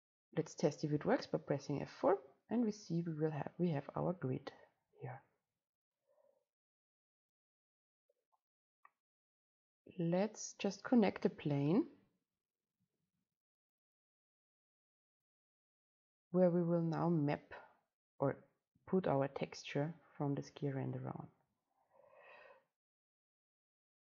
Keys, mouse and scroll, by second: 2.9-4.6 drag, 9.9 scroll down 1, 22.0-24.1 scroll up 1.